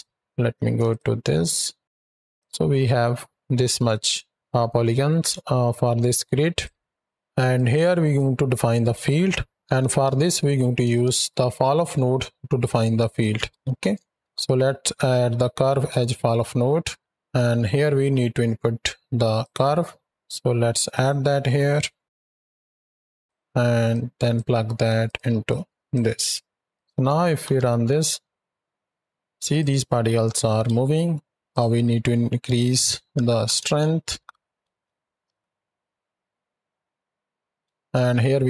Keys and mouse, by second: 0.1 z, 0.8 ctrl+shift+click, 1.8-2.4 drag, 5.3 shift+click, 6.4 click, 6.5 x, 6.9 shift+Right, 6.9 shift+Left, 6.9 z, 7.4-8.0 drag, 11.0 f, 19.3 click, 19.9 shift+a, 21.5 s, 22.4 click, 22.9 s, 23.8 click, 24.9 click, 25.3-25.8 drag, 26.0 click, 27.3 shift+Right, 27.4 shift+Left, 27.8 space, 29.3 click, 31.3-33.4 drag, 31.3 space, 34.0 shift+Right, 34.0 shift+Left, 34.5 space, 35.1 alt+a, 37.5 space.